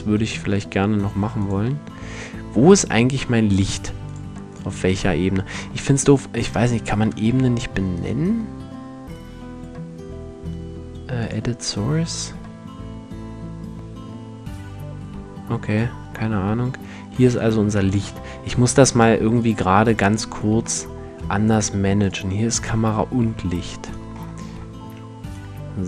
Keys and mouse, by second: 2.8-3.6 middle drag, 21.0 click, 21.2 middle click, 21.6-23.1 drag, 23.4-25.8 right drag.